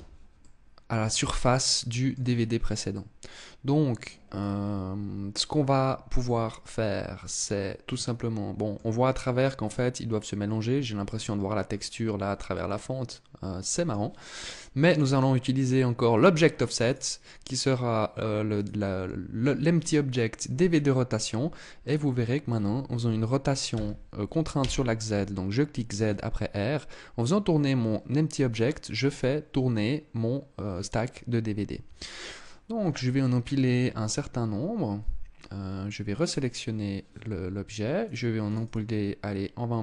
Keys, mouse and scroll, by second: 2.4 middle click, 3.8 scroll down 3, 5.7 middle click, 12.0 middle click, 14.3 click, 16.3 click, 21.3 right click, 23.2 r, 35.7 right click, 37.5 click, 37.9 click, 38.1 click.